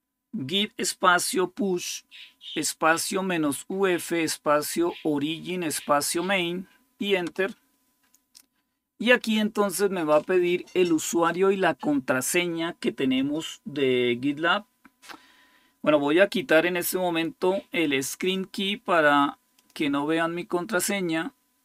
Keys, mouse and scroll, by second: 19.4 click, 21.5 click.